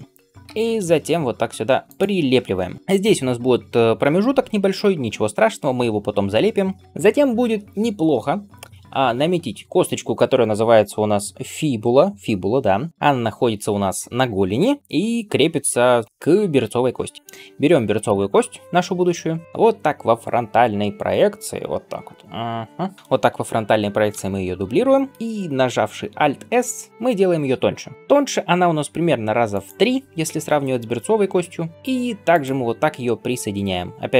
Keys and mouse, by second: 0.3 g, 17.9 l, 19.4 KP_1, 24.5 shift+d, 26.8-34.1 alt+middle drag, 26.9 alt+s, 31.7 g.